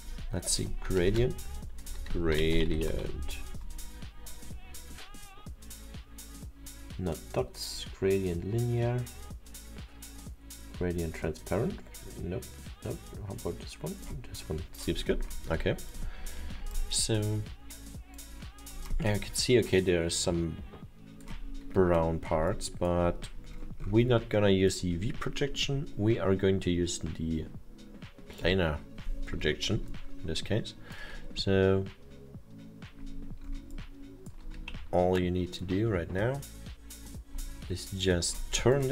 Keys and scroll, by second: 1.0 BackSpace, 2.5-3.4 typing, 5.2 t, 36.7 e.